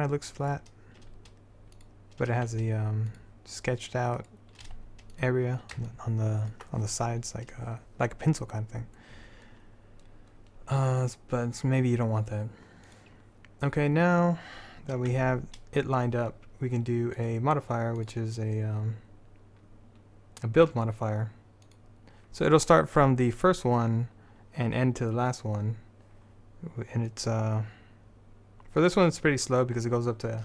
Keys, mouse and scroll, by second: 1.2 s, 2.5 g, 4.8 g, 5.7 middle click, 6.3 middle click, 8.1 middle click, 13.0-15.3 drag, 15.3 Tab, 17.3-20.7 drag, 27.2-30.3 drag.